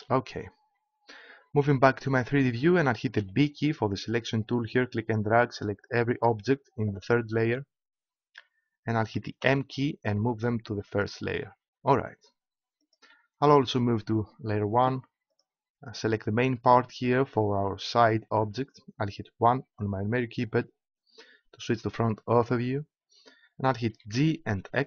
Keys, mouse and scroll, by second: 3.1 b, 9.4 m, 12.9-15.3 drag, 15.3-17.5 right drag, 19.4 KP_1, 23.9 g.